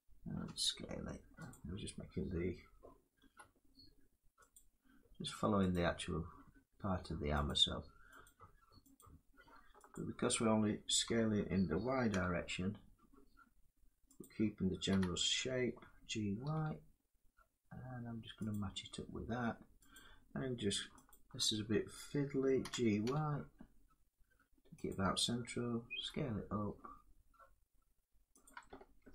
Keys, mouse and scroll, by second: 0.0 s, 1.2 click, 2.9 s, 4.2 click, 6.1 click, 7.1 click, 7.9 click, 8.7 click, 9.6 alt+click, 10.8 s, 11.8 y, 13.9 click, 14.6 g, 16.8 y, 18.2 click, 19.6 click, 20.8 alt+click, 22.3 g, 22.7 y, 24.6 click, 25.6 s, 28.1 click, 28.7 ctrl+z.